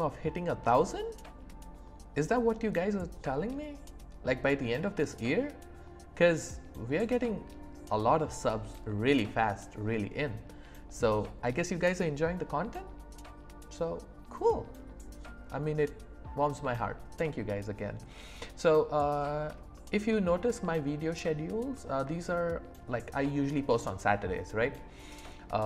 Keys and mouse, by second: 18.6 click, 18.6 right click, 19.8 shift+middle click, 20.3 middle click, 21.8 middle click, 22.3 shift+middle click.